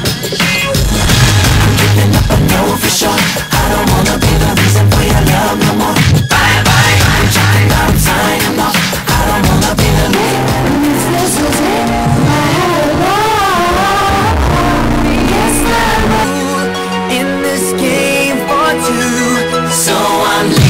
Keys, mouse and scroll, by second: 0.2 Down, 0.9 Return.